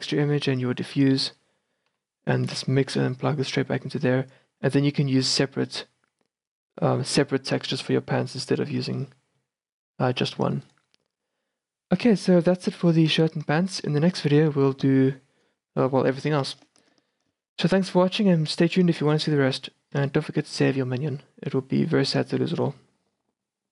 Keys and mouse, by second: 2.0 x, 2.3-7.8 drag, 2.6 x, 7.8-11.5 middle drag, 11.5-12.9 right drag, 12.9-16.1 middle drag, 12.9 a, 20.7-21.6 drag.